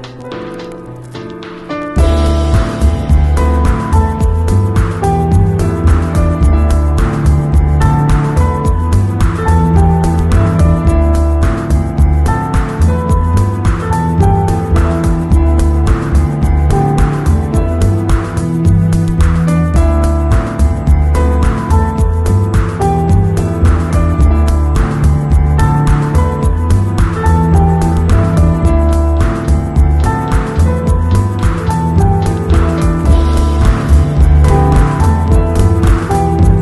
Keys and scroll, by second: 0.7 [, 3.1 ], 4.7 [, 14.4 v.